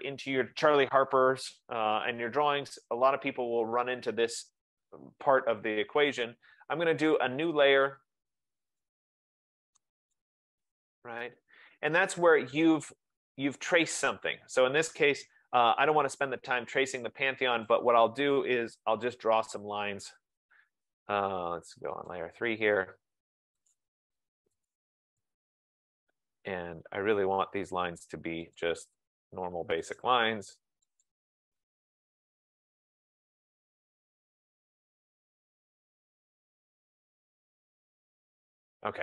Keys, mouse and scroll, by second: 7.3 click, 9.0 click, 10.2 click, 11.1 click, 13.7 click, 17.8 click, 19.4 click, 20.5 click, 22.2 click, 23.8 click, 24.7 click, 28.7 click, 30.1 click, 31.1 click, 34.5 click, 36.0 click, 37.8 F15, 38.3 click.